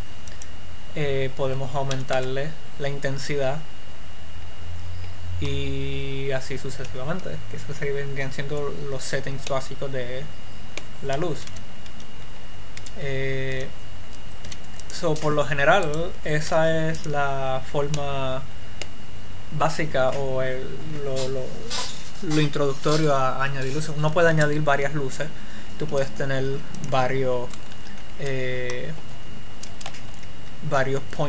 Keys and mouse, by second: 0.9-2.9 drag, 10.0-12.1 middle drag, 12.1 x, 13.2 z, 13.9 z, 14.7 x, 15.1 click, 16.2-17.9 drag, 16.8 x, 19.9 middle click, 24.6 shift+a, 28.3 1, 30.5 KP_1.